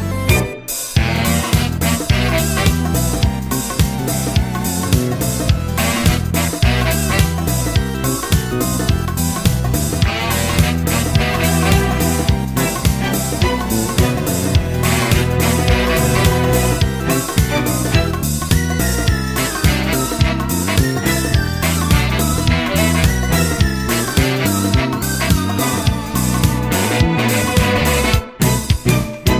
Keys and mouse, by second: 0.7 middle click, 2.0 middle click, 3.8 middle click, 6.2 middle click, 7.8 middle click, 9.4 middle click, 10.0 middle click, 11.1 middle click, 12.6 middle click, 13.3 middle click, 14.2 right click, 16.0 middle click, 16.8 middle click, 18.8 middle click, 25.5 middle click.